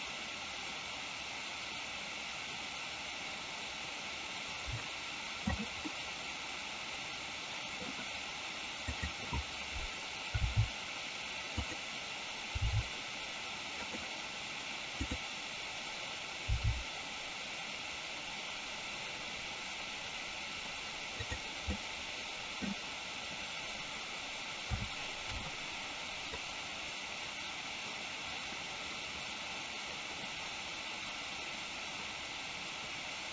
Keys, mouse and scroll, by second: 5.8-7.8 middle drag, 9.0 click, 10.3 r, 11.6 click, 12.6 g, 13.8 click, 15.1 click, 21.0 click, 21.7-22.7 middle drag, 26.3-33.3 drag.